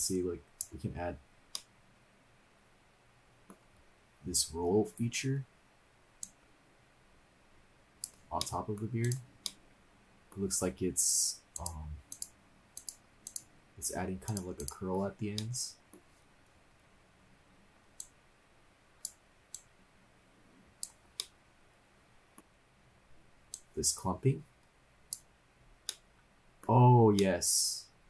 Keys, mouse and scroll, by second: 1.3 scroll up 1, 1.6-3.8 middle drag, 3.8-4.2 scroll down 2, 6.2-8.1 drag, 8.4 middle click, 9.0 click, 9.4 middle click, 11.5 click, 12.8 click, 14.3 click, 14.7 click, 15.2 scroll up 1, 15.5-16.1 middle drag, 18.0-19.2 drag, 19.8-20.8 drag, 21.2-22.4 middle drag, 22.4-23.1 scroll up 12, 23.5 click, 25.9 middle click, 27.2-28.0 middle drag.